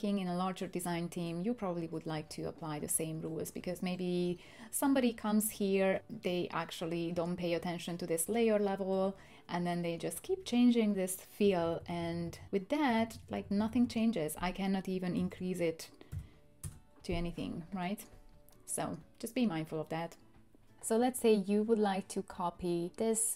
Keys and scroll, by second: 11.4 Up, 11.6 Up, 11.8 Up, 11.9 Up, 12.1 Up, 12.2 Up, 12.4 Up, 12.4 Up, 12.5-12.9 Up, 13.1 Up, 13.3 Up, 13.4 Up, 13.5 Up, 13.7 Up, 14.0 Up, 15.1-16.1 typing, 16.6 Return.